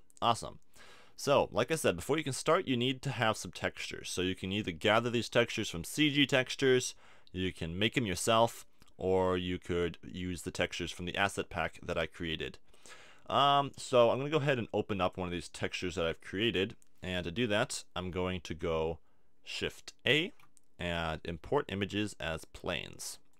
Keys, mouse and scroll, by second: 7.5-12.0 middle drag, 14.5 middle click, 15.0-16.9 drag, 17.7-20.1 middle drag, 20.1 shift+a.